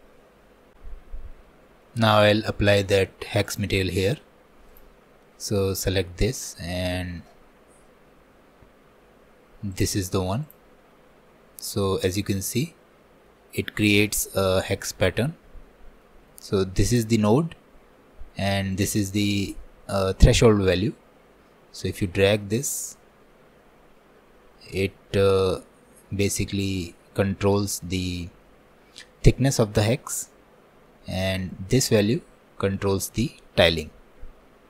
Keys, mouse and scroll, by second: 1.9-3.6 middle drag, 3.6 click, 4.8 click, 12.7-13.9 middle drag, 13.9 scroll up 1, 14.3 middle click, 14.8-15.3 scroll down 2, 18.8-25.7 drag, 32.1-34.6 drag.